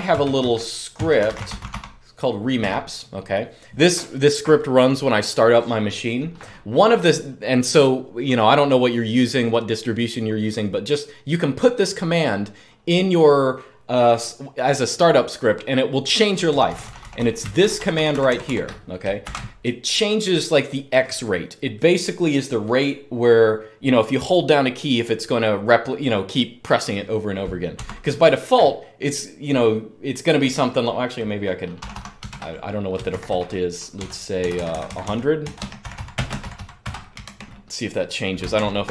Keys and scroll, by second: 0.0-3.7 typing, 16.2-16.9 typing, 17.3 alt+k, 17.5 alt+k, 17.7 alt+k, 17.8 alt+k, 19.0 v, 27.6 Escape, 31.5 typing, 32.0 super+Return, 32.8 shift+Insert, 33.7-37.5 typing.